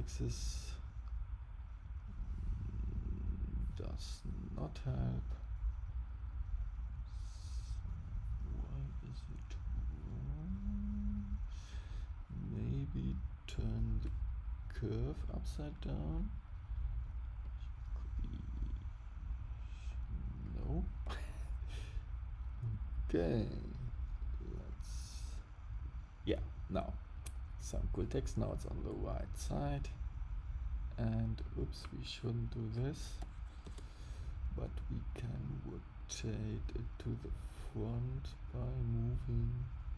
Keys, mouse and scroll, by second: 13.0 click, 17.4 click, 22.7 click, 24.6 click, 29.5 click, 32.4 click.